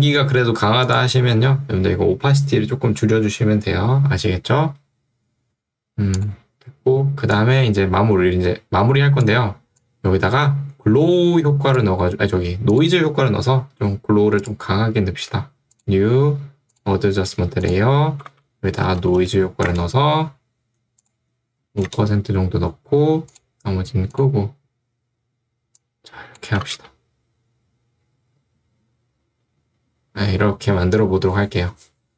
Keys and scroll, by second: 18.3 ctrl+space, 18.9 o, 19.3 i, 19.7 Return, 21.7 5, 21.9 Return, 26.8 space.